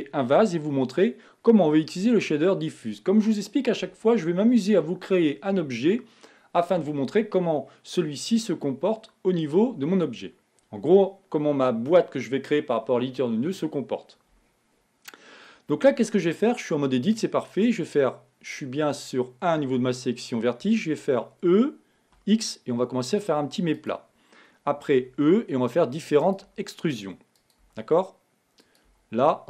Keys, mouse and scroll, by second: 21.2 e, 25.3 e, 26.8 e.